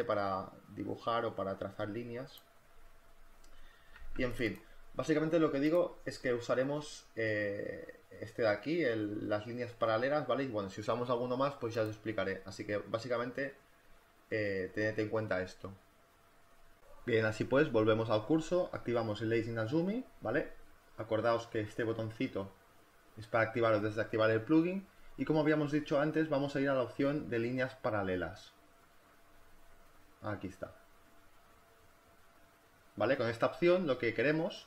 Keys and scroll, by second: 4.0 z, 12.6 space, 19.9 space, 21.3 space.